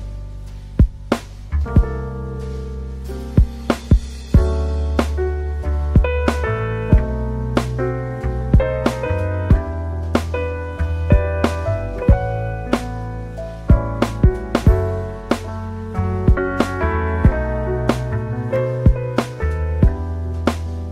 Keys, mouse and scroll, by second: 14.8 click, 17.8 click, 18.5 click, 19.1 click, 20.6 click.